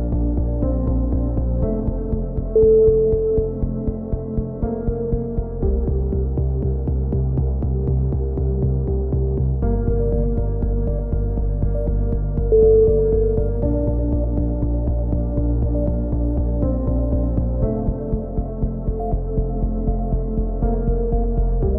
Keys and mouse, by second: 0.3-1.3 middle drag, 1.8 z, 2.0 z, 17.0 z.